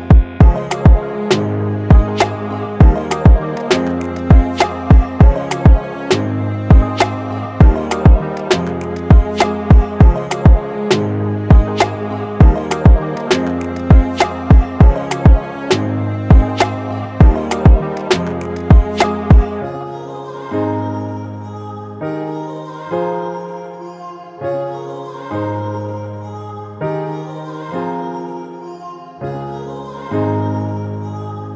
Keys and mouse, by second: 1.4-5.3 middle drag, 5.8 KP_3, 7.2-8.3 middle drag, 8.3 middle click, 9.5-12.3 middle drag, 13.7 middle click, 14.0 middle click, 16.7 space, 22.6 space, 26.6-28.5 middle drag, 28.5-29.7 drag, 29.8-31.2 drag.